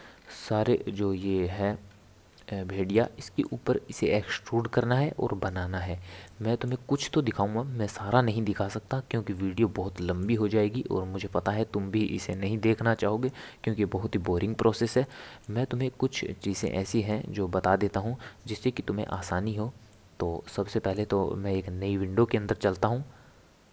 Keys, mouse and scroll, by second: 0.2-1.1 scroll down 4, 1.1 scroll up 1, 1.1-1.4 scroll down 5, 2.3 scroll down 1, 2.9-5.9 shift+middle drag, 6.2-9.4 shift+middle drag, 9.6-12.7 shift+middle drag, 15.1-18.1 shift+middle drag, 19.9-22.9 middle drag.